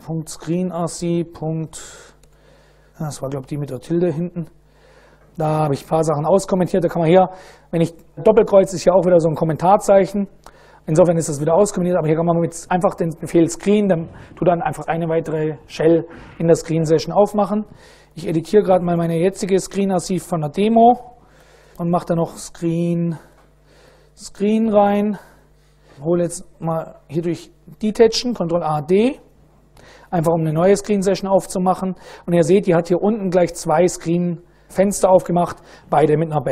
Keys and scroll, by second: 0.0-1.1 typing, 1.4 Tab, 1.6 Tab, 3.6 shift+`, 3.8 shift+Tab, 4.0 shift+Tab, 4.0 shift+Return, 17.2-19.5 typing, 21.0-24.9 typing, 21.3 Tab, 21.5 Return, 25.2 ctrl+x, 25.2 ctrl+s, 26.9 ctrl+a, 28.6 ctrl+d, 29.4-30.9 typing, 31.4 Return.